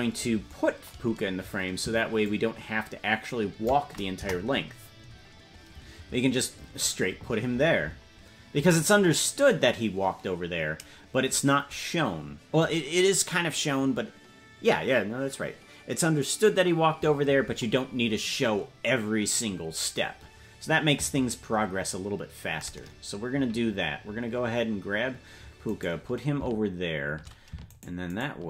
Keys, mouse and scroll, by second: 1.0-1.5 scroll down 2, 2.3-3.8 shift+drag, 4.2 KP_0, 5.1-6.3 scroll up 1, 6.3-7.2 scroll up 5, 7.8-8.4 scroll down 1, 8.4-8.7 scroll down 3, 17.8-18.5 scroll up 2, 18.5-19.2 scroll up 2, 23.4-23.9 scroll down 2, 24.6-25.3 scroll down 1, 25.8 right click, 27.8 shift+right click.